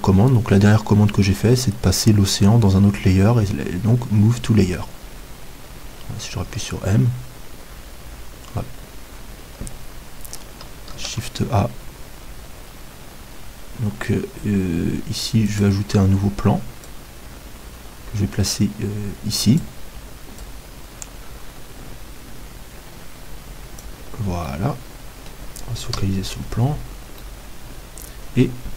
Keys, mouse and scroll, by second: 6.5 m, 10.9 shift+a, 16.8-24.5 drag, 24.5-26.1 middle drag, 25.9 KP_Decimal.